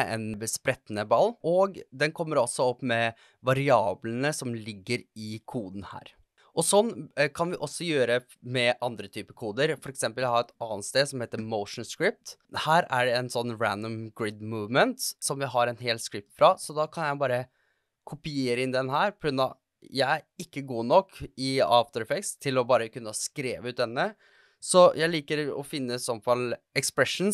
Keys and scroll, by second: 24.8 super+c.